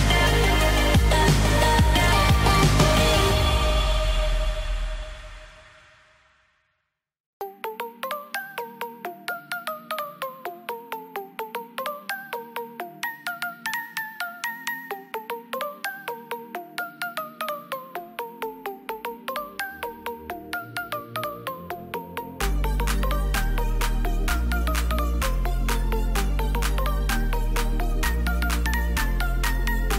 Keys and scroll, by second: 0.9 ctrl+z, 10.9 ctrl+z, 12.6 ctrl+alt+z.